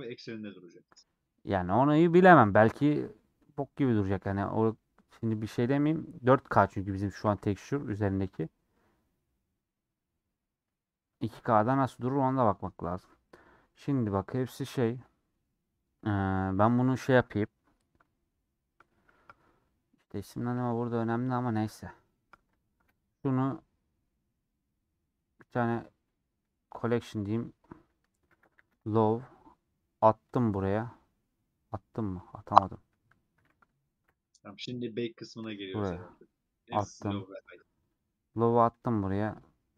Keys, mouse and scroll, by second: 5.9-7.9 drag, 7.9-22.8 middle drag, 22.8 m, 34.0 m.